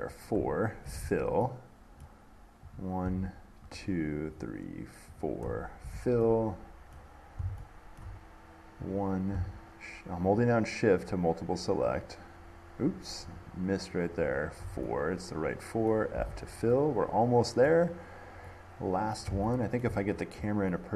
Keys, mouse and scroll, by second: 0.3 shift+click, 2.2-2.6 scroll, 2.9 click, 4.0 shift+click, 4.6 shift+click, 5.4 shift+click, 7.2 middle click, 8.2 shift+middle click, 9.1 click, 10.6 shift+click, 11.3 click, 12.2 shift+click, 13.6 shift+click, 14.4 shift+click, 15.5 middle click, 16.1 middle click, 17.9 middle click, 19.3 middle click, 20.0 shift+middle click, 20.3 middle click, 20.5 middle click.